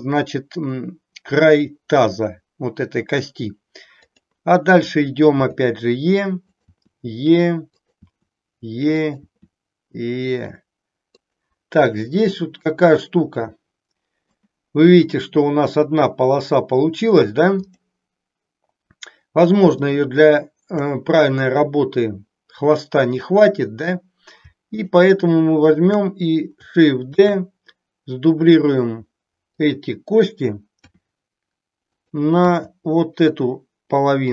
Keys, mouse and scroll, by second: 5.3 e, 6.7 e, 7.9 click, 8.1 e, 9.1 click, 9.3 e, 11.3 click, 12.4-14.4 middle drag, 17.5 click, 19.6 shift+click, 24.6 shift+click, 25.6 shift+click, 27.2 shift+d, 29.6 click, 30.9 r, 32.4 g, 34.2 click.